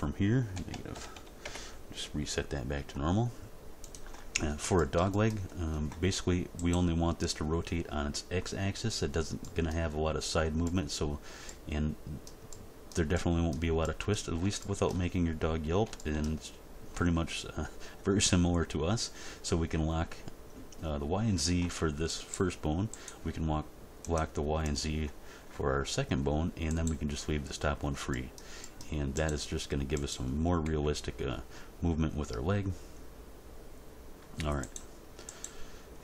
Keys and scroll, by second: 0.5 -, 0.7 1, 0.9 8, 1.1 0, 1.4 Return, 30.7 g.